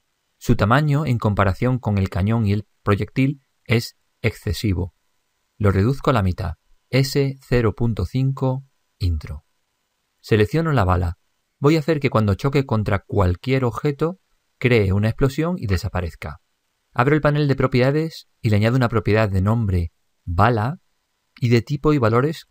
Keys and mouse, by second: 0.0 click, 7.1 s, 11.8-13.3 right drag, 14.0-15.8 middle drag, 17.0-22.0 drag, 18.9 n.